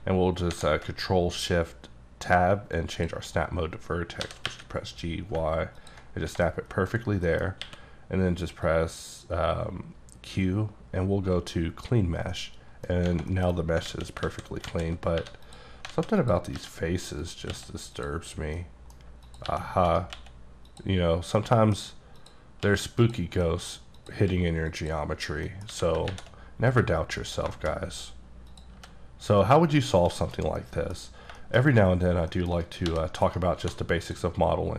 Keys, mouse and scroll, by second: 0.5 ctrl+shift+Tab, 2.8 click, 3.3-4.2 scroll up 3, 4.2 g, 4.5 y, 5.8 ctrl+click, 6.1 ctrl+scroll down 4, 6.5 middle click, 7.0-7.3 scroll down 4, 7.3 middle click, 7.6 q, 8.7-12.1 drag, 12.3 middle click, 12.8 scroll down 1, 13.3 middle click, 13.5-13.8 scroll up 6, 13.9 alt+a, 14.2 alt+a, 14.7 alt+z, 14.9 alt+scroll down 2, 15.2 3, 15.5 click, 15.9 alt+z, 16.2 click, 16.5 g, 17.2 right click, 17.5 x, 18.0 click, 18.3-18.6 scroll down 2, 18.6 middle click, 19.3 click, 19.5 g, 19.9 right click, 20.2 x, 20.7 click, 21.1 scroll down 1, 21.4 middle click, 22.2 click, 22.6 x, 23.0 click, 23.4 middle click, 24.0 click, 24.3 x, 24.7 click, 25.5 middle click, 25.7 a, 26.1 shift+`, 26.6-27.3 scroll up 3, 27.3 1, 27.6 shift+middle click, 27.7 shift+scroll up 3, 28.5 click, 28.8 g, 29.4 right click, 29.8-30.2 scroll down 5, 30.2 shift+middle click, 31.0 scroll up 2, 31.4 shift+middle click, 32.3 shift+middle click, 32.9 g, 33.2 right click, 33.6 2, 34.0 click.